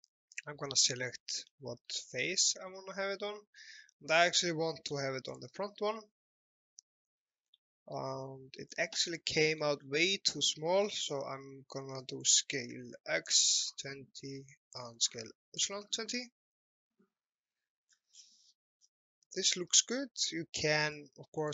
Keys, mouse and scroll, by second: 1.7 alt+middle click, 2.2 shift+middle click, 5.3 click, 7.1 scroll down 1, 7.7 alt+middle click, 8.2 shift+middle click, 9.1 scroll down 1, 9.4 alt+middle click, 9.9 scroll down 1, 10.7 middle click, 12.0 click, 13.2 KP_2, 14.4 KP_0, 14.5 click, 15.6 KP_2, 15.7 KP_0, 17.6-18.0 scroll up 1, 19.2 alt+middle click, 20.9 click.